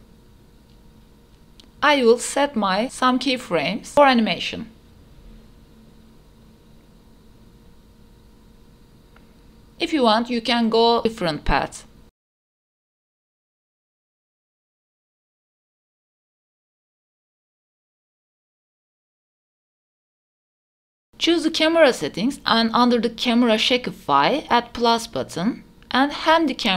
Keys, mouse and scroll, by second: 0.9 q, 2.7 i, 3.1 click, 3.2 space, 3.8 space, 6.1 space, 6.7-7.1 drag, 7.4-8.2 drag, 8.6-9.5 drag, 9.5 space, 12.1 space, 12.3-12.6 drag, 12.8 q, 13.9 i, 14.3 click, 14.4 space, 15.5 space, 15.6 space, 15.7 drag, 16.0-16.5 drag, 16.8 click, 16.9 space, 17.3 a, 18.9 space, 19.1-19.7 drag, 19.8 q, 20.1 a, 20.8-21.3 drag, 21.3-23.1 scroll down 4, 23.1 click, 24.5-25.1 scroll down 4, 25.9-26.7 drag.